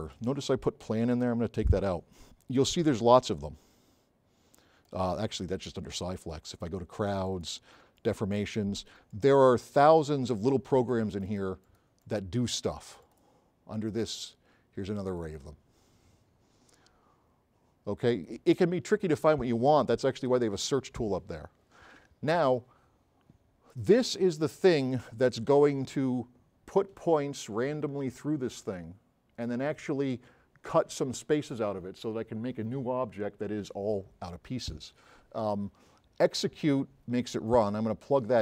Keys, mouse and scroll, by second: 1.2 BackSpace, 3.0-4.5 drag, 14.3 click, 16.8-18.5 drag, 22.7-23.2 drag, 37.6-38.4 drag.